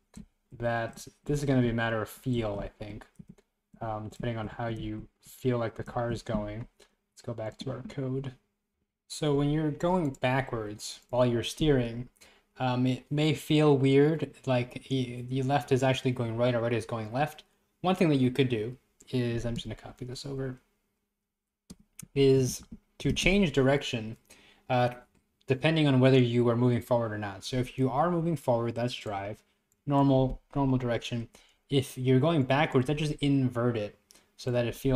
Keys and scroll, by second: 0.0 Left, 0.4 Right, 0.5 Left, 1.0 Right, 1.4 Left, 1.7 Right, 2.9 Left, 3.0 Right, 3.7 Right, 4.5 Left, 5.0 Right, 5.2 Left, 6.7 Left.